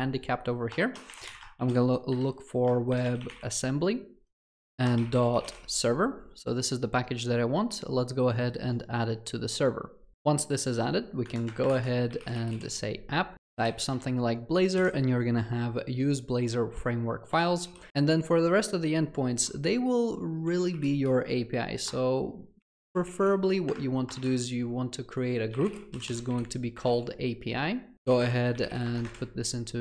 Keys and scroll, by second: 16.8 Return, 23.7 Return.